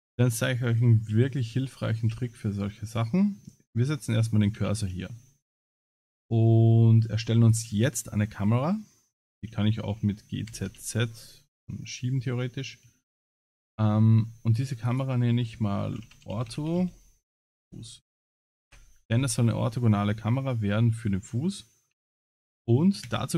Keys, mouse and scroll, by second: 0.1 shift+middle click, 0.4 click, 1.1 shift+s, 4.6 shift+a, 9.3 g, 13.8 scroll down 4, 14.7 click, 14.7 scroll down 3, 14.9 click, 18.3 s, 22.3 shift+click, 23.0 ctrl+c.